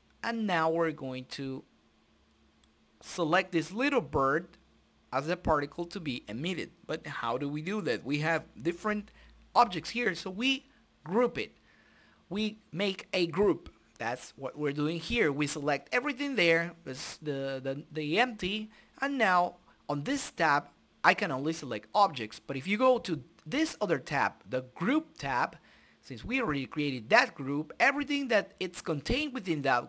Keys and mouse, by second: 0.0 middle click, 0.5 KP_Decimal, 1.9-3.5 drag, 3.9-5.3 drag, 5.6 ctrl+g, 7.8 F6, 12.5 a, 12.7-14.8 middle drag, 14.8 right click, 16.7-18.3 drag, 17.3 middle click, 18.7 click, 23.2 click, 24.1-25.6 drag, 26.3 click.